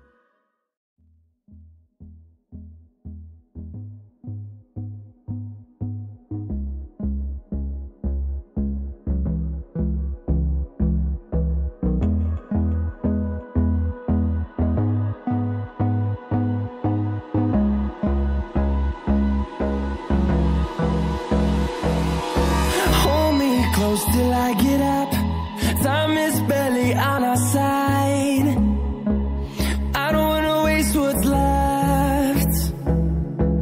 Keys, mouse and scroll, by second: 11.0 scroll up 1, 11.7 ctrl+c, 12.5 click, 13.6-14.0 scroll up 1, 14.0 click, 19.6 right click.